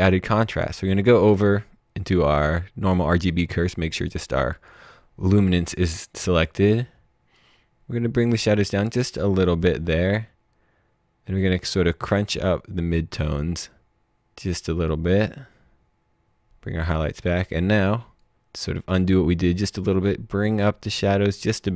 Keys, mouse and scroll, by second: 4.5 click, 7.3 click.